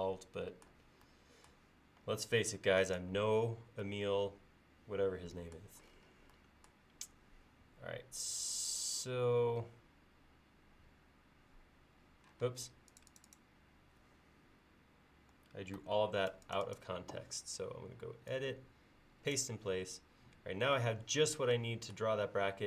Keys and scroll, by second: 2.0 e, 7.3 l, 12.5 space, 15.8 super+x, 20.4 l.